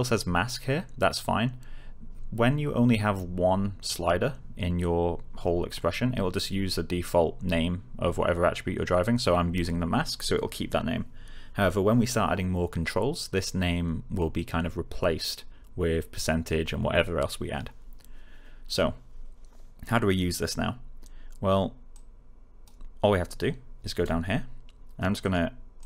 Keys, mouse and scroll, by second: 21.9-22.8 click, 25.1 click.